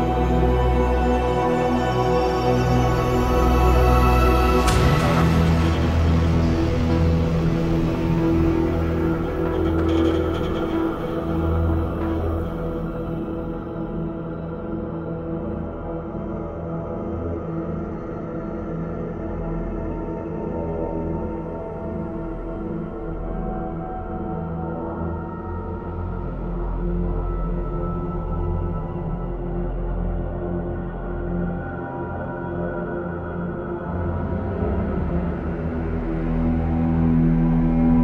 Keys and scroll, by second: 10.7 b, 11.5 b, 11.6 x, 18.2 ctrl+o, 19.9 ctrl+o, 20.0 j, 25.0 ctrl+d, 25.1 v, 27.0 ctrl+v, 27.1 ctrl+t, 33.3-34.6 typing.